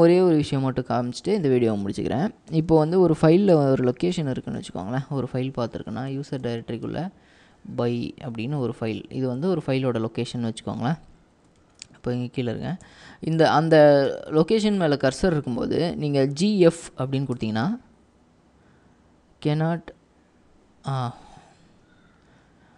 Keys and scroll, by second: 2.6 i, 3.7-6.9 typing, 8.4 typing, 9.6 Escape, 11.6 ctrl+w, 11.8-14.9 typing, 17.1-17.8 typing.